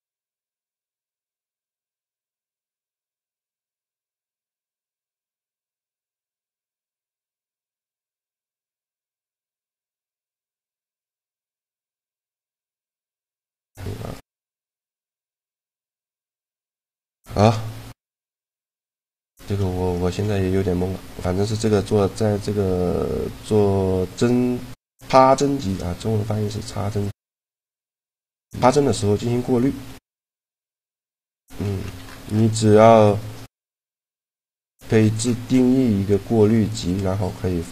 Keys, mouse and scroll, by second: 2.1 shift+g, 2.7 right click, 3.5 shift+g, 4.8-5.9 right drag, 5.9-9.2 drag, 9.5 middle click, 10.0 shift+g, 12.7 click, 15.6 middle click, 19.3-22.1 middle drag, 26.7-28.5 drag, 30.3-31.9 drag, 37.5 click.